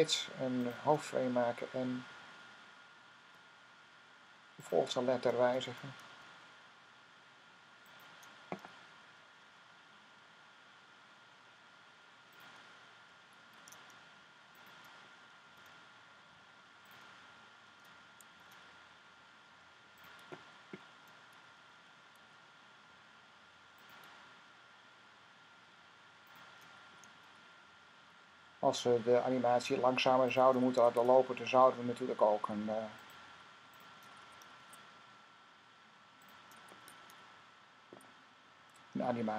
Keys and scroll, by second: 3.1 F6, 6.0 F6, 9.7 F6, 10.2 fn+F6, 13.4 F6, 15.3 F6, 18.1 F6, 21.4 F6, 27.0 F6, 30.7 F6, 34.4 F6, 36.8 fn+F6.